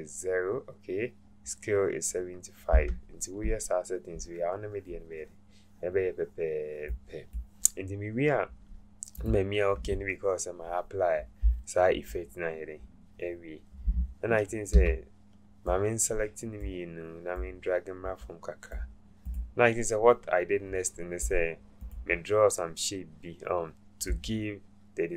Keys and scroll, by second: 14.8 v.